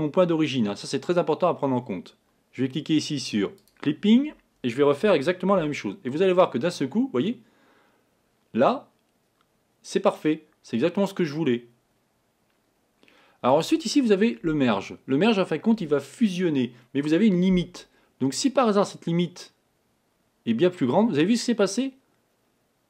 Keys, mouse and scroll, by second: 3.6 click, 18.6-21.5 drag.